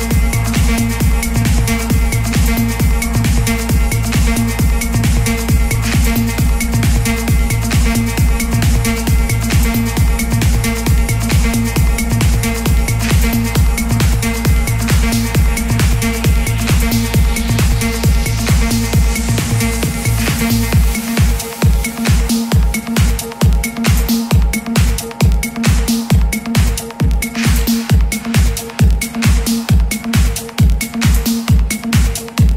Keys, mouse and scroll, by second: 0.7-7.7 drag, 9.3-9.7 typing, 13.2 click, 14.0 ctrl+d, 16.1-21.9 drag, 24.5 KP_3, 24.7 KP_0, 24.9 KP_0, 31.4 click.